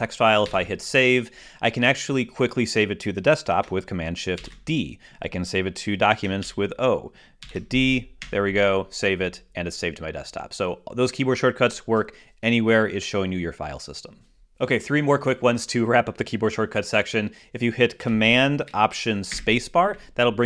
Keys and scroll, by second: 0.8 super+s, 4.7 shift+super+d, 6.8 shift+super+o, 8.6 shift+super+Return, 20.0 ctrl+super+space.